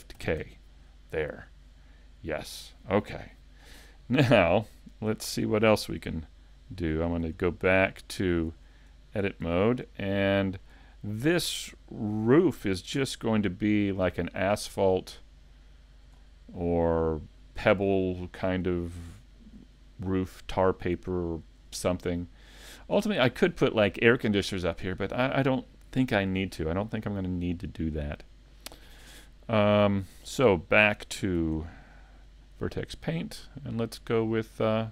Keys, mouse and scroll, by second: 0.2 shift+k, 1.8 middle click, 9.1 middle click, 9.4 a, 9.9 middle click, 10.9 shift+middle click, 13.0 c, 16.8 right click, 17.0-17.4 scroll down 2, 17.4 middle click, 18.8-19.4 scroll up 3, 19.3 shift+middle click, 19.7 middle click, 20.7 scroll down 1, 21.2 shift+middle click, 31.5 Tab, 32.6 middle click.